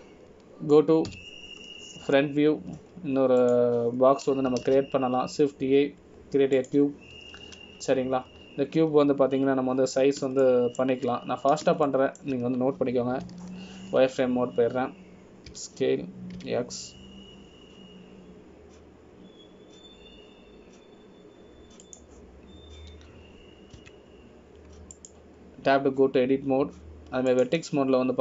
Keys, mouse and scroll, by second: 3.3 KP_1, 4.3 scroll down 1, 5.0-5.6 scroll down 5, 5.6 click, 6.8 shift+a, 10.4 scroll down 1, 11.9 scroll down 1, 11.9-12.4 scroll up 2, 12.6 shift+middle click, 14.0 shift+middle click, 14.0 scroll up 1, 15.4 z, 17.7 s, 26.0 Tab, 27.1 click.